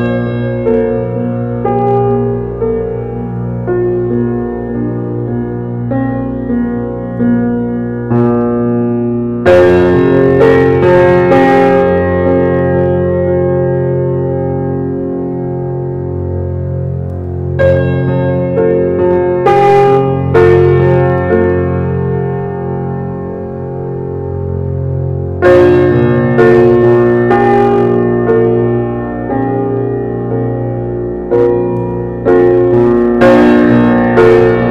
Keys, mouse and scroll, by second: 1.8-3.8 drag, 4.2 click, 6.3 x, 6.9 click, 7.5 g, 9.4 shift+middle click, 10.2 g, 12.9 scroll up 1, 13.2 shift+middle click, 13.5 scroll up 1, 13.8-14.7 shift+middle drag, 14.7 g, 15.9 shift+d, 17.2 shift+d, 19.0 shift+d, 20.2 click, 20.5 scroll down 2, 20.8-22.5 middle drag, 22.5 click, 23.0 scroll down 1, 23.4-24.3 shift+middle drag, 24.3 g, 26.5 alt+middle drag, 27.2-27.6 middle drag, 27.6 scroll down 2, 27.8 middle click, 28.6 click, 28.9 click, 33.4-34.2 middle drag, 34.2-34.7 scroll up 6.